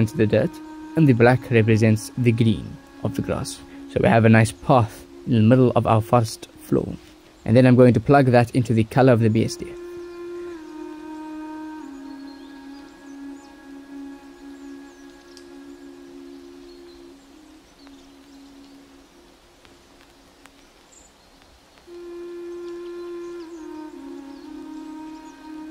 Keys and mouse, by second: 1.2 ctrl+shift+click, 4.7 click, 12.8 ctrl+shift+click, 18.3-19.4 drag, 19.7-22.3 drag, 22.7-24.1 drag, 25.3 ctrl+s.